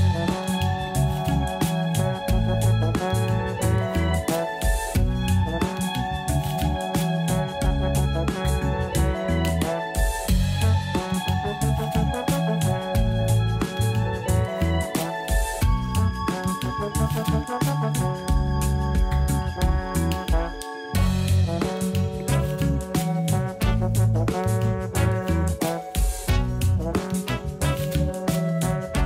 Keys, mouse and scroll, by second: 0.9 click, 10.0 click, 12.0 click, 13.8-16.5 drag, 20.1 click, 21.0 Tab, 23.5 a, 23.9 a, 24.4 a, 24.6 a, 26.6 l, 28.1 click.